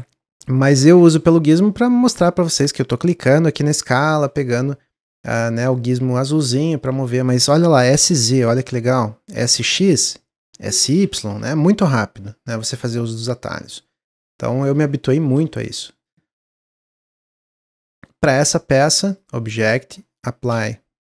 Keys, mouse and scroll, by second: 0.5-3.6 drag, 4.5 click, 5.2 ctrl+z, 5.7 click, 6.9 ctrl+z, 7.9 s, 13.2-16.0 middle drag, 16.0 click, 17.6-19.1 middle drag, 19.1-21.0 drag.